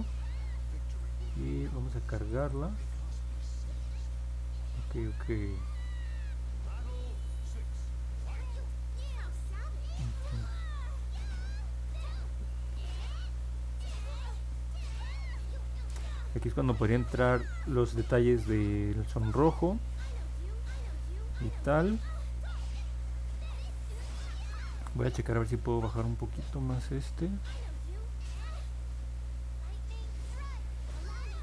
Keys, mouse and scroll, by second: 0.9 click, 2.3 click, 2.4 click, 2.8 scroll down 1, 3.6 scroll down 1, 4.1 middle click, 5.8-6.9 middle drag, 7.6 scroll up 1, 7.7 scroll down 1, 8.4-10.9 middle drag, 11.7 scroll down 1, 12.4 middle click, 13.7 middle click, 14.5 scroll down 1, 15.1 middle click, 17.6 middle click, 18.1 middle click, 27.7 click, 28.2 click, 30.3 click.